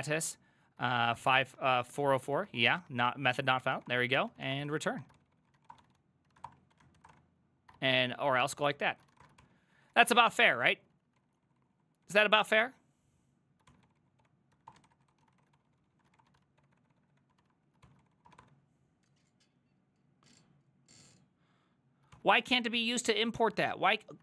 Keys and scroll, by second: 0.0-2.4 typing.